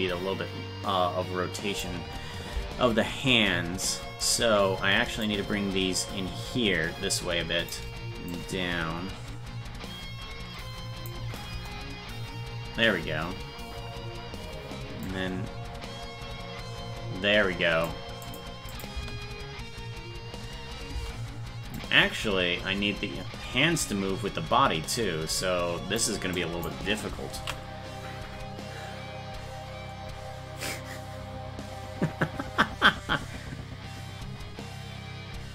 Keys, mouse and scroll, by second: 5.2-7.7 shift+drag, 8.3-11.1 drag, 11.5 KP_0, 15.1-17.9 drag, 18.3 click, 18.7 click, 18.9 space, 21.8-26.0 drag, 26.4 click, 27.6 ctrl+s.